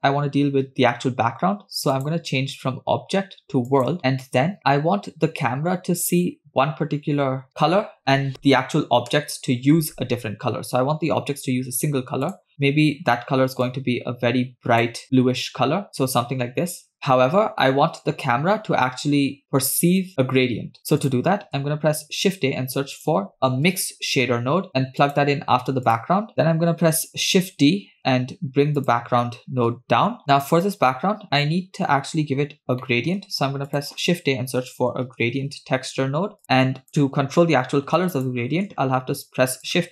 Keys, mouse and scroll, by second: 2.0-4.0 drag, 4.0 middle click, 12.3 click, 20.8 scroll down 1, 21.0 click, 22.2 shift+a, 26.3 click, 27.4 shift+d, 30.2 ctrl+shift+click, 30.2 scroll up 3, 32.8 middle click, 33.3 shift+a, 36.5 click, 38.0 click, 38.6 shift+a.